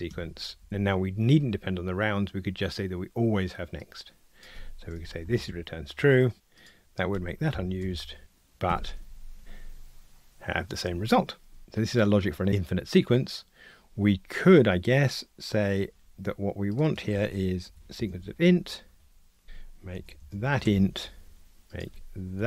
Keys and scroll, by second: 7.8 alt+Return, 8.7 ctrl+r, 18.4 Escape.